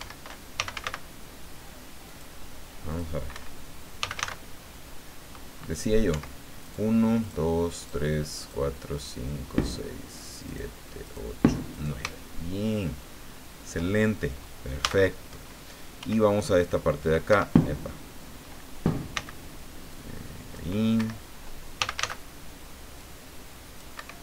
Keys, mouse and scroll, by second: 0.5 f, 0.7 a, 0.8 c, 2.0 click, 2.9 click, 3.3 Escape, 4.0 f, 4.1 a, 6.1 Escape, 6.6 right click, 7.2 right click, 7.8 right click, 8.4 right click, 8.9 right click, 9.6 right click, 10.4 right click, 11.0 right click, 11.7 shift+right click, 12.2-13.8 shift+middle drag, 14.8 a, 16.0 f, 17.3 Escape, 19.1 c, 19.9 click, 21.0 Escape, 21.8 f, 21.9 a, 23.0-24.0 drag, 23.9 Escape.